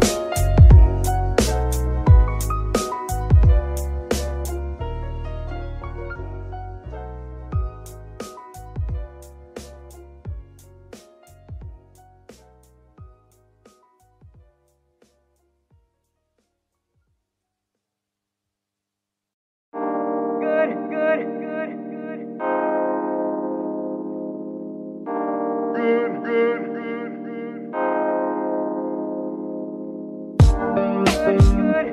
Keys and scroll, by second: 0.4 BackSpace, 0.6 2, 1.0 Return, 2.7 F2, 3.5-4.8 typing, 4.3 Left, 4.4 Left, 6.9 F2, 7.6-8.8 typing, 9.2 Return, 11.2 F2, 11.9 BackSpace, 12.0 BackSpace, 12.2 BackSpace, 12.3 BackSpace, 12.9 Left, 13.1 Left, 13.5 BackSpace, 13.8 2, 13.9 Return, 15.6 F2, 16.3 BackSpace, 16.5 BackSpace, 16.6 BackSpace, 16.7 BackSpace, 17.3 Left, 17.4 Left, 17.8 BackSpace, 23.5 F2, 24.1 BackSpace, 24.3 BackSpace, 24.4 BackSpace, 24.5 BackSpace, 25.0 Left, 25.1 Left, 26.4 BackSpace, 27.2 2, 28.2 BackSpace, 28.4 3, 28.8 Return, 30.7 F2, 31.2-31.9 typing.